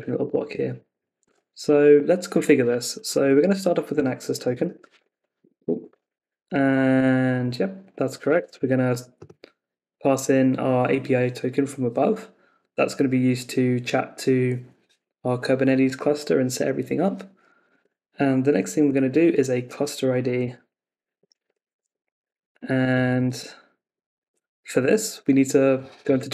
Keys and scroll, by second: 7.3 Tab, 17.7 Escape, 23.4 Left, 24.2 super+s.